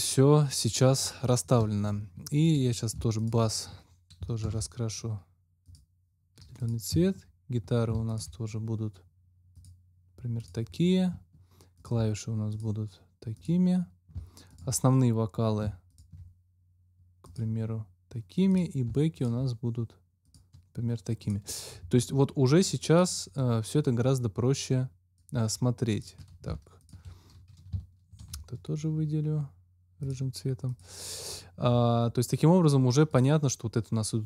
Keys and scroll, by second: 4.4 alt+c, 6.8 `, 7.8 shift+`, 28.2 alt+c.